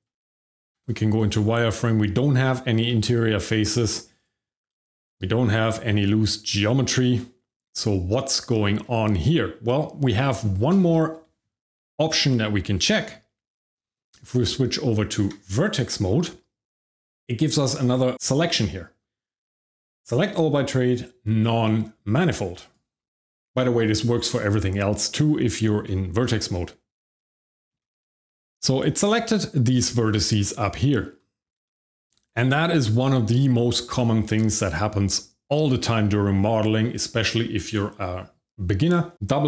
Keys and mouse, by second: 0.1 Tab, 0.7 shift+z, 1.1 middle click, 2.9 shift+z, 4.1-5.1 drag, 6.1-8.8 shift+middle drag, 13.1 Tab, 18.1-22.7 drag, 28.2 middle click, 28.8 shift+middle click, 30.5 shift+middle click, 31.6 shift+middle click, 32.6 shift+middle click.